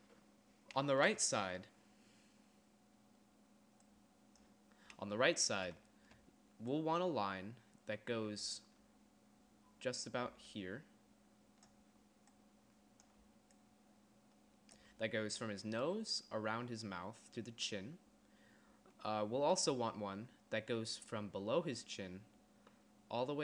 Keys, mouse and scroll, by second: 1.1 d, 6.4 d, 6.8 d, 10.1 d, 11.9-15.1 d, 16.7 d, 19.8-21.4 typing.